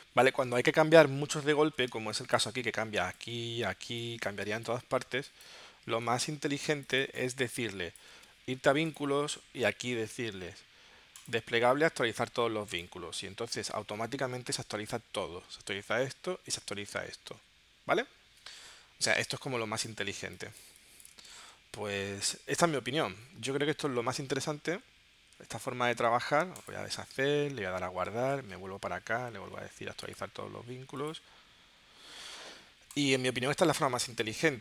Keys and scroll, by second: 2.0 space, 3.9 space, 5.1 space, 19.3 space, 21.5 super+Tab, 24.2 super+z, 25.3 super+s, 28.2 super+Tab, 33.2 space.